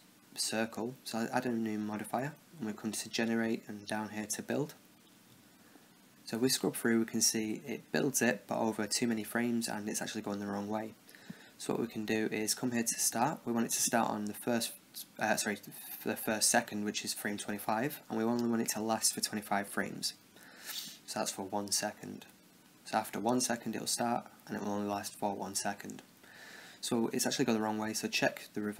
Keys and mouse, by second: 0.1-3.6 drag, 7.3-9.4 drag, 12.7-14.7 drag, 16.7-18.6 drag, 22.2-25.3 drag, 28.1-28.7 drag.